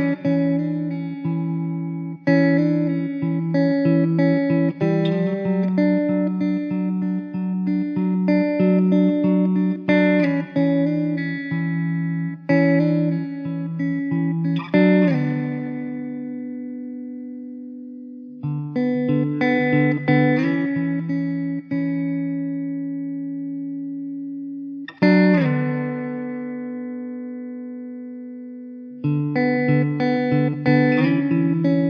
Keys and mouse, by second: 0.9 middle click, 2.7 middle click, 6.3 middle click, 23.7 middle click, 26.9 1, 27.7 alt+w, 28.8 alt+middle click.